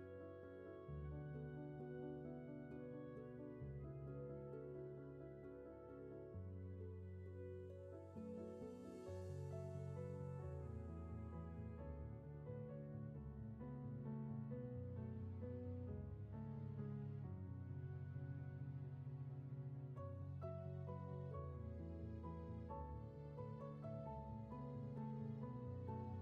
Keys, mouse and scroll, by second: 4.1 ctrl+z, 6.5 ctrl+z, 17.9 ctrl+z, 23.0 ctrl+z, 26.0 ctrl+z.